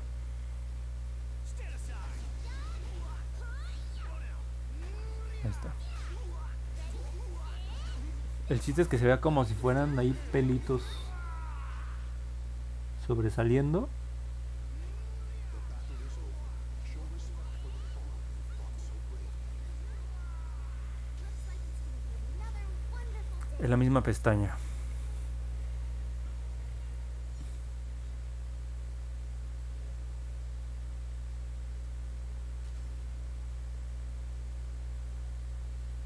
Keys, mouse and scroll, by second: 0.0 click, 0.2 click, 0.8 click, 1.4 click, 3.0 click, 4.1 click, 4.4 click, 4.6 click, 10.8 click, 11.2 click, 11.6 click, 13.5 click, 13.8 click, 14.1 click, 14.6 click, 14.9 click, 15.2 click, 16.2 click, 16.9 click, 17.6 click, 18.1 click, 18.8 click, 19.2 click, 19.4 click, 19.7 click, 20.0 click, 23.2-23.9 scroll down 2, 24.0 scroll up 1, 24.4 middle click, 24.8 middle click, 27.7 click, 28.1 click, 28.3 click, 28.6 click, 29.2 click, 29.5 click, 29.8 click, 30.1 click, 30.4 click, 30.6 click, 30.9 click, 31.2 click, 31.5 click, 31.8 click, 32.1 click, 32.4 click, 32.7 click, 33.0 click, 33.3 click, 33.6 click, 33.8 click, 34.1 click, 34.4 click, 34.7 click, 35.0 click, 35.3 click, 35.6 click, 35.9 click.